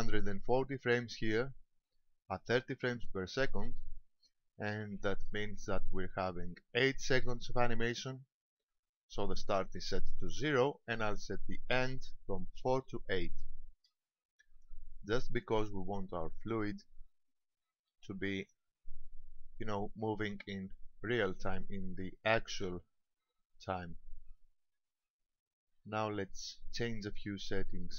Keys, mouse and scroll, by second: 11.9 click.